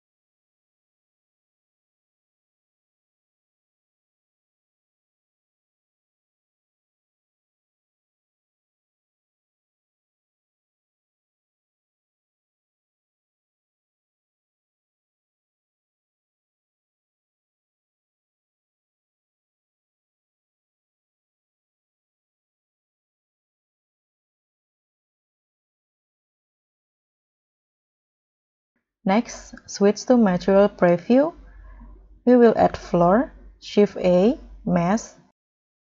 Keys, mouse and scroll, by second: 3.7 scroll up 10, 3.9 middle click, 4.3 scroll up 1, 4.3 scroll down 3, 4.6-5.0 scroll up 5, 5.1 scroll down 1, 5.9 scroll up 2, 6.4-7.5 scroll down 12, 9.6 scroll down 1, 9.6 scroll up 1, 9.8 middle click, 10.1 scroll down 2, 10.3-10.7 scroll up 4, 10.8-11.1 scroll down 1, 18.2 scroll down 1, 19.9-20.5 scroll up 4, 20.5-20.8 scroll down 4, 21.2-21.9 scroll up 7, 22.4 scroll down 2, 22.6 middle click, 23.1 0, 23.8 scroll down 3, 24.2 scroll up 2, 24.5 scroll down 1, 25.9-26.2 scroll down 3, 26.2 middle click, 26.7-27.2 scroll down 4, 27.3 scroll up 1, 27.4 middle click, 27.9 scroll up 2, 30.7 ctrl+s, 32.4 scroll up 1, 32.6 middle click, 34.0 shift+a.